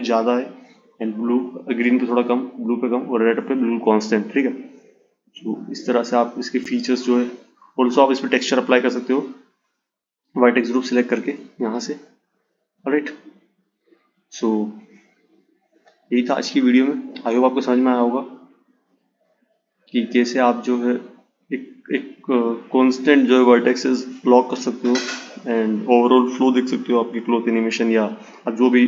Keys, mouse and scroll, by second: 3.6-6.7 drag, 7.8-10.9 drag, 12.4 click, 17.6 click, 19.3-22.3 drag, 26.9-28.8 drag.